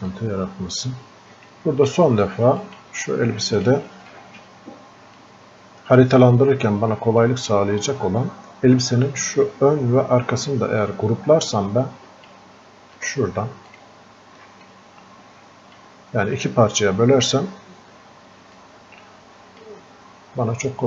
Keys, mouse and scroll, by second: 0.1-7.3 drag, 10.9-13.7 drag, 15.0 click, 17.9-18.6 scroll up 2, 18.9 click.